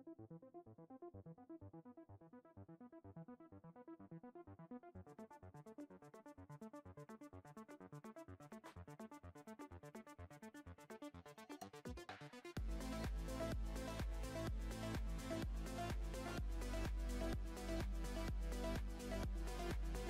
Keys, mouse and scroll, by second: 0.6-1.4 scroll up 7, 1.4-3.4 shift+middle drag, 3.4 scroll up 1, 4.1 ctrl+r, 4.1-7.1 scroll up 1, 9.5-9.8 scroll up 2, 9.8 middle click, 10.5 ctrl+r, 14.3 alt+s, 17.9 ctrl+b.